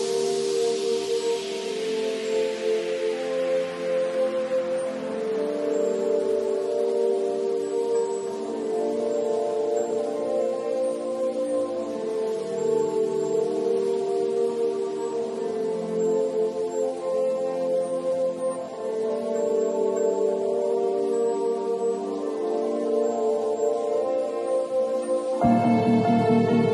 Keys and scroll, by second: 9.1 b.